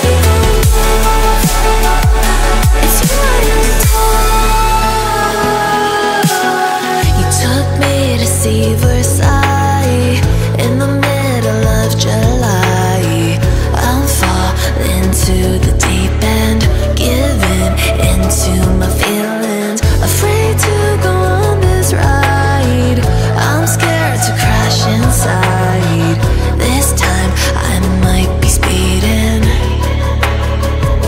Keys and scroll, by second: 0.5 Return, 2.1 0, 2.3 1, 12.0-14.4 typing, 21.3 Return, 22.1-26.7 typing, 24.0 Return, 25.1 Return, 26.5 Return, 28.2 6, 28.4 Return, 28.6 0, 30.3 7.